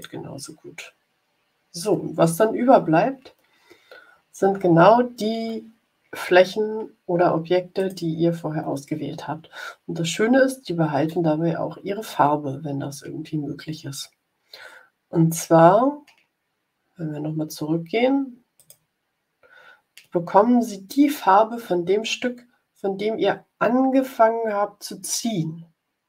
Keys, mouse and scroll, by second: 7.7 click, 18.5 click.